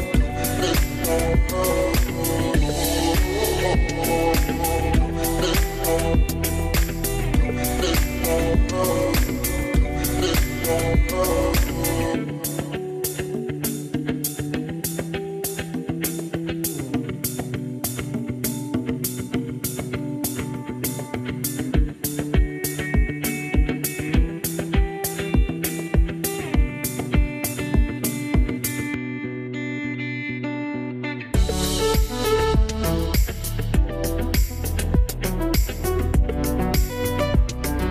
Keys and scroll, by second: 1.8 space, 2.6 z, 4.0 z, 6.6 e, 32.0 F9.